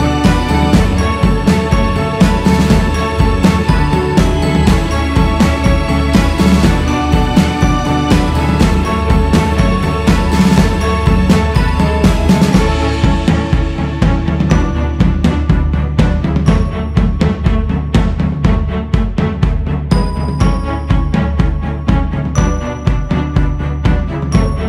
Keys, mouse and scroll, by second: 2.9 x, 4.4 click, 5.4-7.9 drag, 7.9-8.3 scroll down 4, 8.5 scroll up 2, 9.1 shift+s, 9.9-11.8 drag, 11.8 x, 12.2-13.3 scroll up 1, 13.3 click, 14.5-17.4 drag, 17.4 shift+s, 18.0-22.4 drag, 22.4-24.6 scroll down 7.